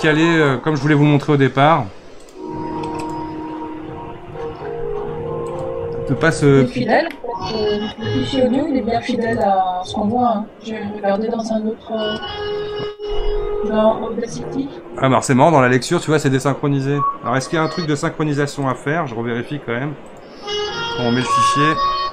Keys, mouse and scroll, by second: 0.3-6.1 drag, 6.7-7.0 scroll up 1, 7.0-9.3 middle drag, 9.3 click, 18.6-21.7 drag.